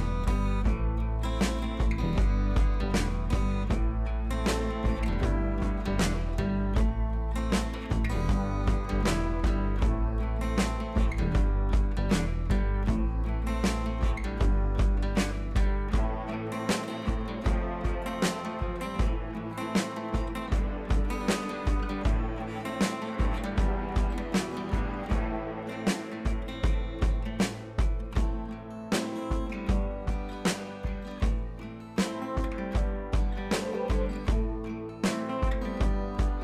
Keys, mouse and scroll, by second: 0.0 Caps_Lock, 2.3-5.2 typing, 6.7-8.3 drag, 8.9-9.3 shift+drag, 11.0-11.6 shift+click, 14.3 click, 14.9-16.3 shift+drag, 18.9-19.5 shift+drag, 20.2 Up, 21.3 shift+click, 21.9 c, 22.6 ctrl+z, 23.0 click, 26.0 right click, 29.3-30.1 shift+drag, 31.2 ctrl+Page_Down, 34.6 Up.